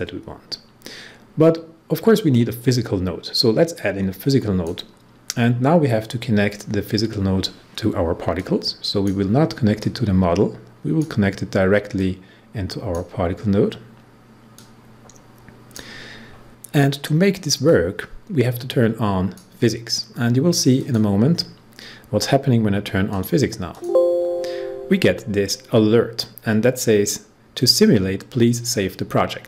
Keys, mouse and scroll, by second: 2.2-7.1 drag, 8.3-16.5 drag, 17.6-20.7 drag, 23.0 click.